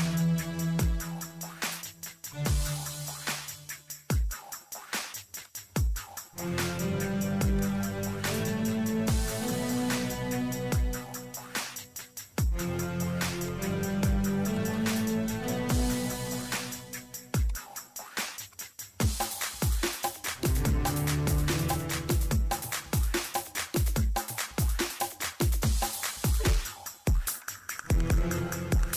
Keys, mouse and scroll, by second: 5.7 scroll up 1, 5.9 scroll down 1, 6.2 scroll up 1, 6.6 ctrl+middle click, 6.8 scroll up 1, 6.9-7.5 scroll down 1, 7.5 click, 8.2-11.6 typing, 12.8 click, 17.7 right click, 19.0 click, 19.6-20.7 typing, 20.9 click.